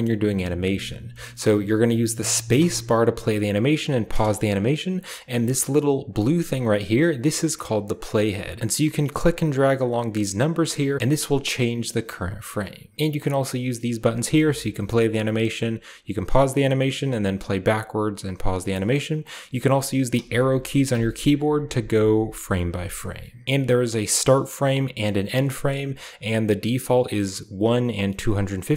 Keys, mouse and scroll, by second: 0.9-2.3 middle drag, 2.5 space, 5.9-6.7 drag, 7.2-8.0 drag, 8.6-9.1 drag, 9.6-10.4 drag, 11.0-12.8 drag, 14.5 drag, 16.0 click, 16.9-19.8 drag, 20.0 Right, 20.1 Right, 20.3 Right, 20.4 Right, 20.7 Left, 20.9 Left, 21.0 Left.